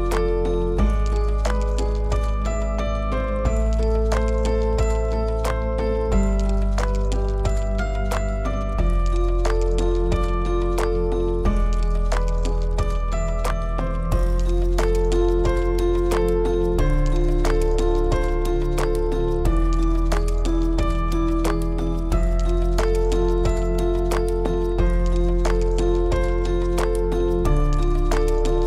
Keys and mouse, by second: 3.2 ctrl+r, 10.2 Tab, 11.3 click, 13.5 click, 14.7 Tab, 16.5 ctrl+r, 19.0 Tab, 19.7 click, 20.2 shift+click.